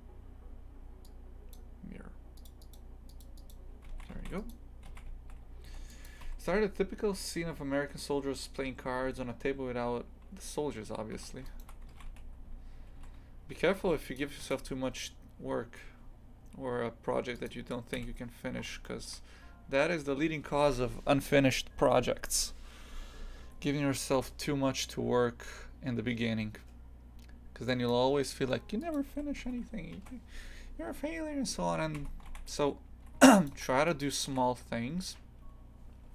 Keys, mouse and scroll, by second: 1.5-3.9 drag, 3.9 shift+f, 4.9 shift+f, 11.1 a, 11.4 alt+shift+right click, 11.9 shift+f, 14.4 ctrl+b, 17.9 KP_3, 18.5 scroll down 2, 18.8 shift+middle click, 19.5-19.8 scroll up 2, 23.4 ctrl+z, 28.9 click, 29.1 a, 29.4 Tab, 32.3 shift+f, 33.5 3, 33.9 right click, 34.3 shift+f.